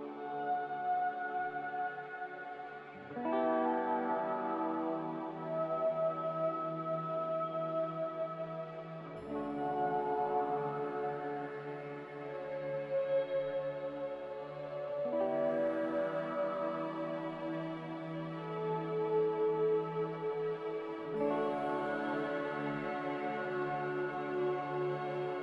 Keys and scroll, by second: 3.0-3.3 typing, 9.5 b, 11.2 typing, 12.5-13.2 typing, 15.2 a, 20.1 a, 21.2 a, 23.3 a.